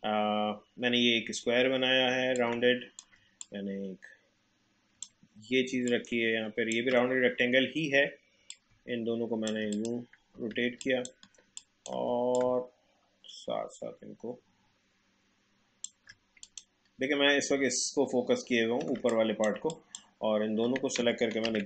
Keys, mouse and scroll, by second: 2.4 click, 3.4-5.9 drag, 5.9-8.5 alt+drag, 8.5 click, 10.3 space, 10.8 ctrl+click, 12.3-16.4 drag, 17.7-18.2 alt+scroll up 1, 18.2-18.8 alt+scroll down 1, 18.9 space, 19.1 click, 19.4 space, 19.6 click, 21.4 ctrl+g.